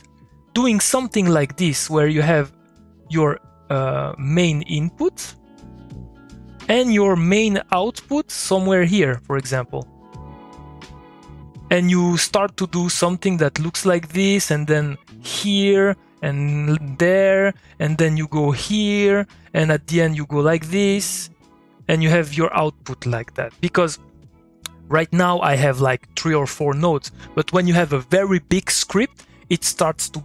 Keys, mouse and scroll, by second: 1.8 click, 7.4 click.